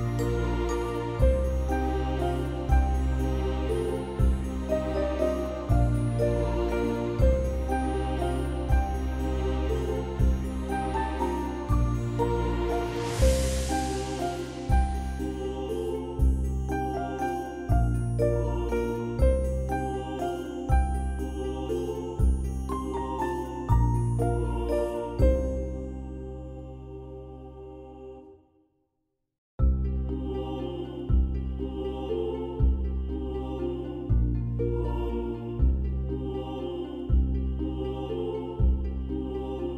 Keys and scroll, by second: 0.0 ctrl+-, 6.5 ctrl+0, 6.8 ctrl+v, 7.9 alt+BackSpace, 9.0 ctrl+=, 9.2 ctrl+=, 9.3 ctrl+=, 9.6 space, 10.6 x, 12.0 space, 13.2 space, 14.6 space, 20.4 x, 25.7 ctrl+v, 27.4 ctrl+BackSpace, 28.5 ctrl+=, 28.9 space, 29.5 ctrl+=, 29.6 ctrl+=, 29.9 ctrl+-, 30.0 ctrl+-, 35.0 [, 35.2 [, 35.6 [.